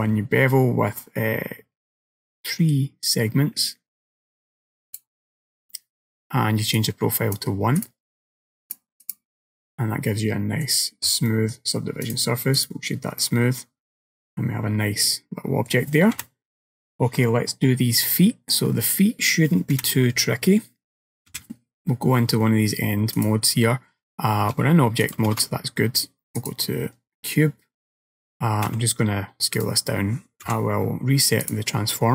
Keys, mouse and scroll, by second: 6.8 click, 7.9 click, 8.7 click, 9.6 middle click, 11.3 middle click, 12.1 right click, 13.3 middle click, 16.2 KP_1, 18.1 middle click, 18.8-19.2 scroll down 3, 19.8 KP_1, 21.4 KP_3, 22.2-22.8 scroll up 3, 22.8-24.4 scroll down 3, 23.2 click, 25.1 click, 25.4 shift+a, 28.7 s, 30.5 g.